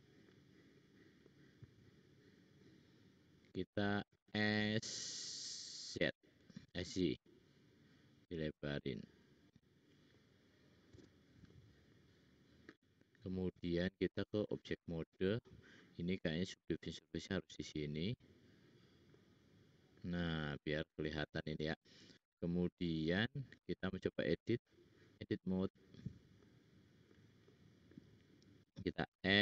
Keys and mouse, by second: 0.7-1.4 drag, 4.1 s, 13.5-15.0 drag, 13.5 middle click, 13.5 right click, 16.9-18.0 drag, 20.2 click, 20.2 middle click, 20.2 right click, 21.5 middle click, 24.0-26.9 middle drag, 29.1 l.